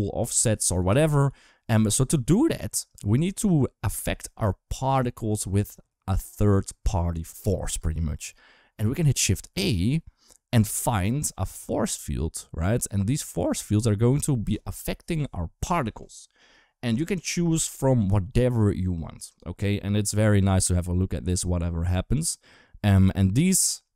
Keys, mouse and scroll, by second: 0.2 d, 0.3 d, 0.8 ctrl+z, 1.1 ctrl+z, 2.7 click, 3.7 space, 7.6 space, 9.2 shift+a.